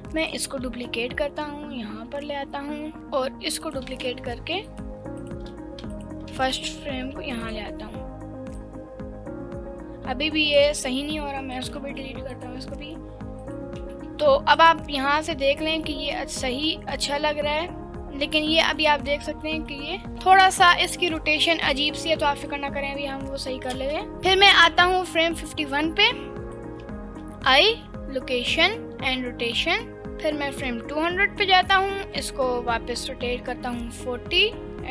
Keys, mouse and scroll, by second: 0.2 click, 0.6 shift+d, 2.9 click, 3.7 click, 3.9 shift+d, 4.7 click, 5.2 click, 5.9 click, 6.4 shift+d, 7.5 click, 8.9-10.6 drag, 11.5 click, 11.7 Delete, 12.3 click, 12.5 Delete, 13.4 click, 13.8 Delete, 14.6-18.8 drag, 18.8 middle click, 19.4-20.2 scroll up 4, 19.5 middle click, 20.1 middle click, 20.4 click, 22.4-23.8 drag, 23.8 space, 24.1 space, 24.1-26.6 drag, 30.0-31.5 drag, 32.2 r.